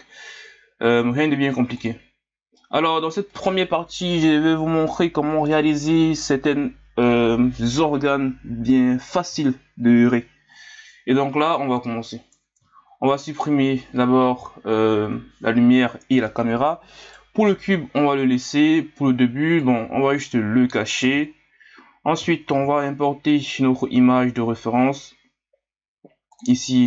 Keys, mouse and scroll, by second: 2.6-11.7 middle drag, 11.7 KP_1, 12.7 scroll up 3, 13.2 click, 15.0 Delete, 17.0-19.6 right drag, 19.6-21.0 drag, 21.0 h, 22.4 shift+a.